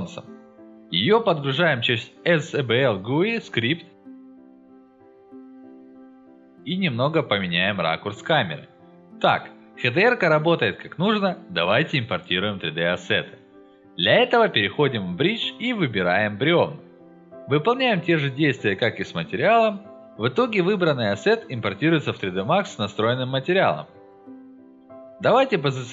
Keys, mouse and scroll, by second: 0.2 click, 1.1 right click, 1.7 click, 2.9-4.3 drag, 4.7 click, 5.6 click, 6.5 alt+middle click, 7.4 middle click, 7.6 ctrl+alt+middle click, 8.1 alt+middle click, 9.5 click, 10.1 scroll up 1, 10.9-11.2 scroll down 2, 11.6-11.9 scroll down 2, 12.1-12.4 scroll up 2, 12.8 click, 14.6 scroll down 4, 15.1-15.5 drag, 15.8 click, 19.7-20.9 drag, 21.3 click, 22.2 click, 23.4 middle click, 23.6 scroll up 1, 23.7 alt+middle click, 24.4 click, 25.5 click.